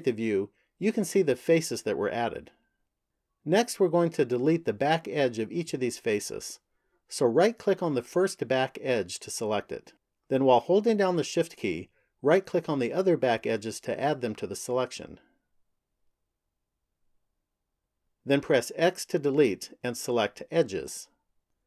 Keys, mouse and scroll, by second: 8.1 right click, 12.0 shift+right click, 13.5 shift+right click, 14.8 shift+right click, 16.3 shift+right click, 17.7 shift+right click, 18.5 x.